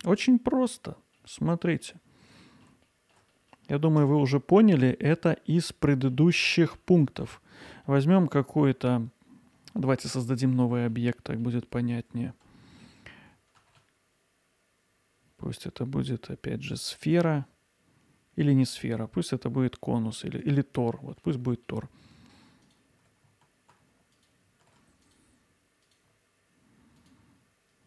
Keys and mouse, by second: 1.0 middle click, 3.4 middle click, 4.0 Tab, 5.5 middle click, 7.0 Tab, 10.1 middle click, 10.8 alt+middle click, 13.6 shift+a, 21.1 middle click, 22.2 Tab, 22.4 click, 24.0 alt+click, 24.7-27.8 alt+shift+drag.